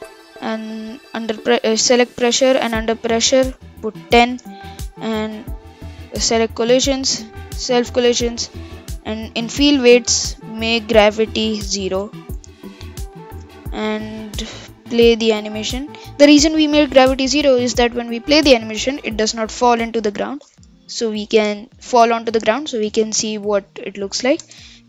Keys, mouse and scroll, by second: 2.0 click, 3.3-6.5 drag, 6.5-7.2 scroll down 5, 7.2-7.8 scroll down 1, 7.8 click, 8.0-9.4 scroll down 1, 9.4 click, 9.7-10.4 scroll down 10, 11.2 click, 11.9-15.1 scroll up 37, 15.4-16.3 middle drag, 16.3-17.8 scroll down 18, 18.9 scroll down 5, 21.7-23.1 scroll up 3, 24.4 shift+space.